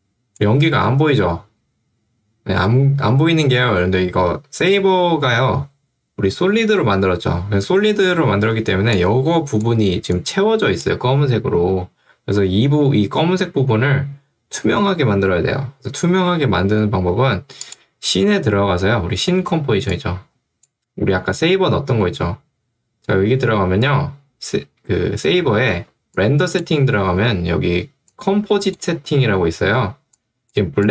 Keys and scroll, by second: 8.5 ctrl+2, 12.3 Escape, 19.4 ctrl+2, 21.2 Escape, 25.8 ctrl+2.